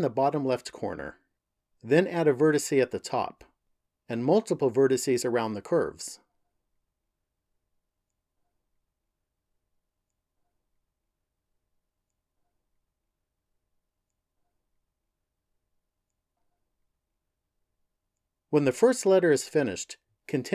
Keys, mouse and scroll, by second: 0.1 ctrl+click, 2.9 ctrl+click, 4.6 ctrl+click, 5.4 ctrl+click, 6.0 ctrl+click, 6.5 ctrl+click, 7.1 ctrl+click, 7.8 ctrl+click, 8.3 ctrl+click, 8.8 ctrl+click, 9.3 ctrl+click, 10.9 ctrl+click, 11.7 ctrl+click, 12.3 ctrl+click, 12.8 ctrl+click, 13.3 ctrl+click, 13.9 ctrl+click, 14.5 ctrl+click, 15.1 ctrl+click, 15.6 ctrl+click, 16.1 ctrl+click, 16.7 ctrl+click, 17.4 ctrl+click, 18.0 ctrl+click, 19.1 ctrl+click.